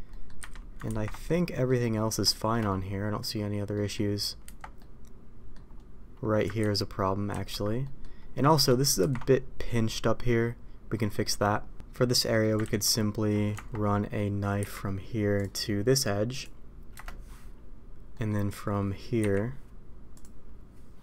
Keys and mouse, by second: 0.0 middle click, 0.3 a, 0.8 ctrl+t, 1.2-1.6 middle drag, 2.2 shift+middle drag, 2.6-3.1 middle drag, 3.7 middle click, 4.4 Tab, 4.7-5.5 middle drag, 6.8 ctrl+z, 7.8 middle click, 9.0 ctrl+t, 12.2 middle click, 12.8 ctrl+z, 13.5 Tab, 14.5 k, 18.1 middle click, 19.1 k.